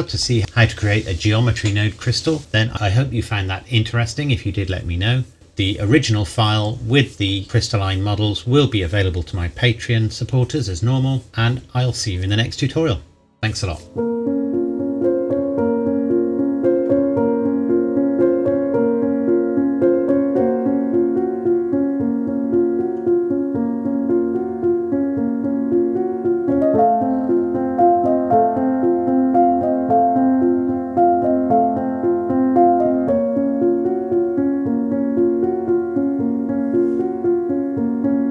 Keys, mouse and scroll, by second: 0.4-1.7 scroll down 2.